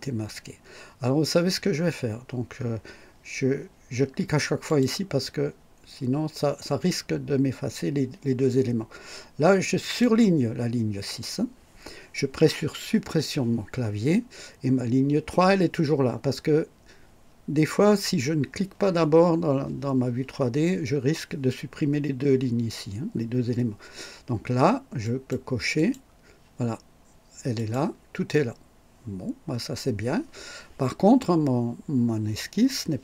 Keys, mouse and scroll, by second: 4.7 click, 9.8 click, 13.0 Delete, 25.0 click, 25.7 click, 27.6 click.